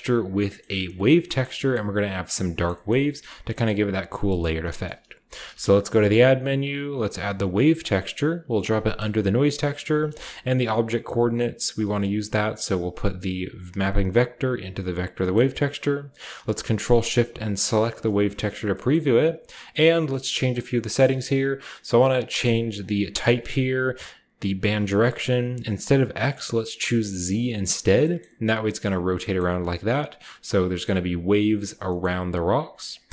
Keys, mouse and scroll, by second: 0.3-2.3 scroll up 2, 0.6-1.0 middle drag, 1.2 shift+middle click, 1.6 middle click, 2.7-3.3 shift+middle drag, 3.5 middle click, 4.2 middle drag, 4.4-5.7 typing, 4.7 shift+click, 6.8 click, 8.3 click, 8.6 middle click, 8.6-9.9 typing, 8.8-10.8 scroll up 1, 8.9-16.4 drag, 9.2 middle click, 9.7 middle click, 11.5-14.8 middle drag, 17.6 ctrl+shift+click, 20.3 middle click, 20.6-22.8 scroll up 1, 20.9-22.8 middle drag, 23.1 click, 27.1 click, 27.6 scroll down 2, 29.2 middle click, 29.4 scroll up 2, 31.1 scroll down 2, 31.2 middle click, 31.4 scroll up 1, 31.7 middle click.